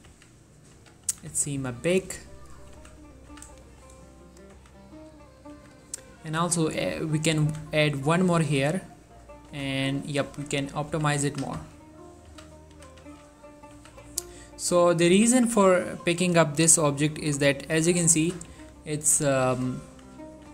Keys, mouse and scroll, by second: 0.2 z, 0.8 z, 1.2 s, 1.4 x, 2.5 click, 2.9 z, 3.4 z, 3.7 shift+middle click, 4.2 click, 4.6 s, 5.5 click, 5.6 z, 6.5 ctrl+r, 6.7 click, 6.9 right click, 7.6 s, 8.6 click, 8.7-13.8 typing, 9.1 click, 10.0 right click, 10.9 click, 12.3 click, 13.7 click, 14.7 click, 15.2 z, 15.8 s, 16.6 click, 18.6 z, 19.4 click, 19.9 s, 20.4 click.